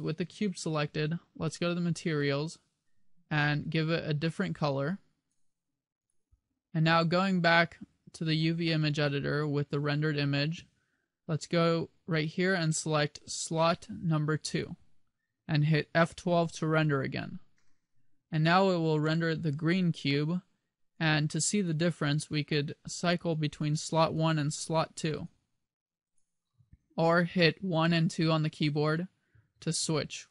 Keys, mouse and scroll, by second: 4.9 click, 18.1 F12, 22.7 click, 24.5 click, 26.3 click, 27.9-30.0 typing.